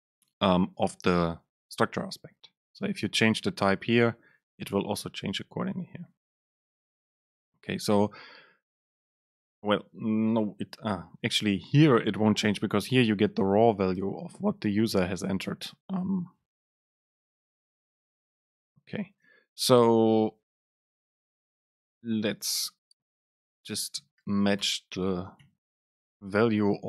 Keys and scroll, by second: 7.3 Right, 19.3 super+space, 21.0 BackSpace, 22.8 super+space.